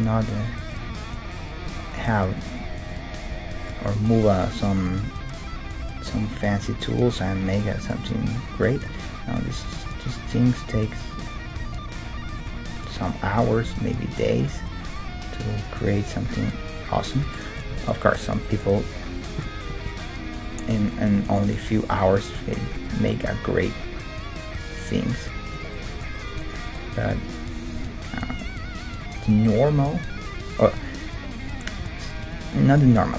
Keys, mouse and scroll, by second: 0.6-3.7 middle drag, 0.8 g, 0.9 g, 2.4-4.8 right drag, 3.3 g, 5.4-8.7 right drag, 6.0 g, 8.7-10.5 middle drag, 9.0 g, 10.5-15.2 right drag, 10.7 g, 12.0 g, 13.7 g, 14.5 g, 16.1-20.6 middle drag, 18.3 Tab, 21.2 Tab, 21.9-24.5 right drag, 23.2 g, 25.7-28.5 middle drag, 27.1 g, 28.3 g, 29.7 g, 31.5-33.1 right drag, 31.8 g.